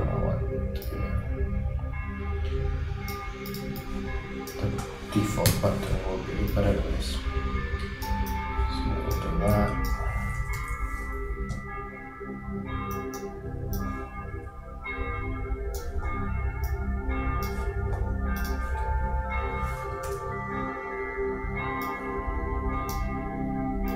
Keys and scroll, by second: 5.5 super+g, 20.1 super+d.